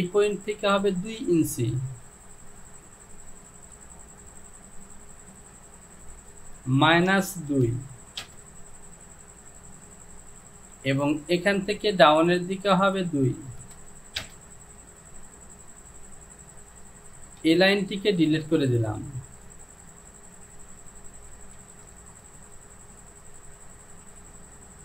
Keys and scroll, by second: 6.0 Down, 7.0 KP_Subtract, 7.6 KP_2, 8.3 Return, 12.8 Down, 13.7 KP_2, 14.2 Return, 17.6 Delete, 21.6 ctrl+z.